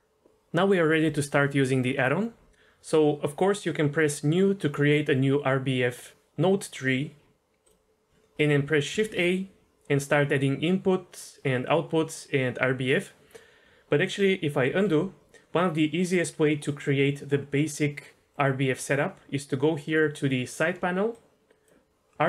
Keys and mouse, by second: 8.9 shift+a, 14.7 ctrl+z, 21.1 click.